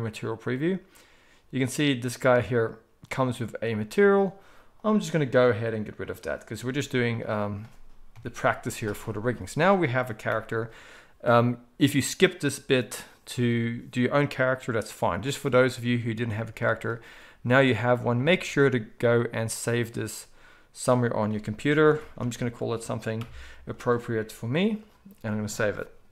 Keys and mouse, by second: 6.0-26.1 drag, 6.6 z, 8.1 KP_1, 10.2 n, 18.5 ctrl+s.